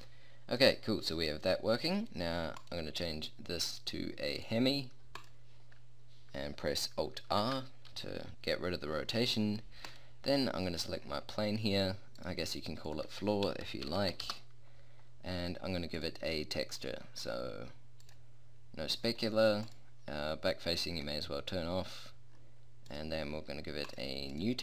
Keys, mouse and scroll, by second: 0.7-1.9 middle drag, 1.9-2.6 middle drag, 7.3 alt+r, 14.0 o.